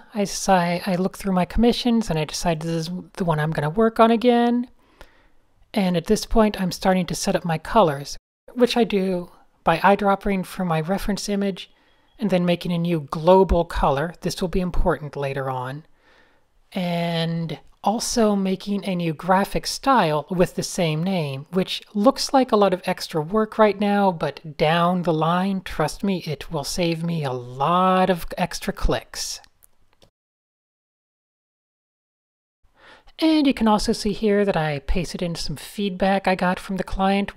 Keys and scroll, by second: 6.4 f, 6.9 super+space, 7.7-12.5 typing, 13.8 super+v, 14.0 super+Return, 14.5 super+v, 14.7 super+Return, 16.2 super+v, 17.5-19.1 typing, 20.2 super+v, 21.6-26.6 typing, 22.6 alt+shift+super+Tab, 22.7 alt+shift+super+g, 24.6 alt+shift+super+g, 27.5 super+z, 28.1-29.5 typing, 31.0 alt+shift+super+r, 35.9 v, 37.1 shift+super+h.